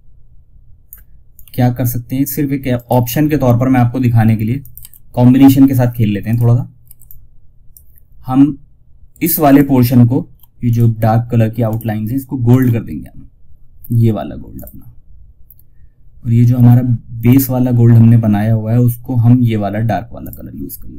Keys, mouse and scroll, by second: 2.0 ctrl+right click, 3.9 shift+click, 4.1 F2, 5.6 click, 6.1 F2, 6.3-9.7 drag, 16.5 click, 19.5 click.